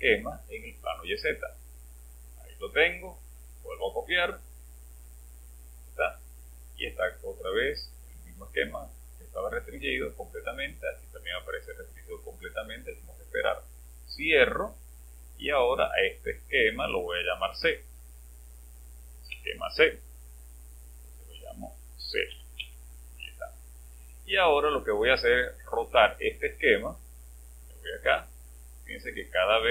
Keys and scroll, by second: 19.3 BackSpace, 19.4 BackSpace, 19.6 BackSpace, 22.3 Home, 22.5 c.